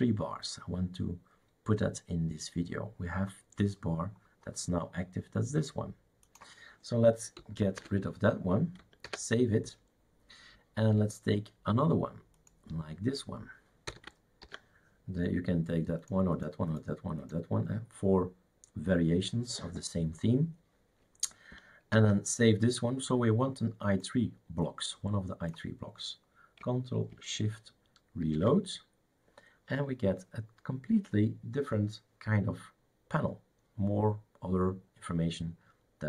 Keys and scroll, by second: 8.0 typing, 9.2 ctrl+s, 14.1 BackSpace, 14.4 ctrl+s, 21.9 ctrl+s, 28.5 shift+super+r.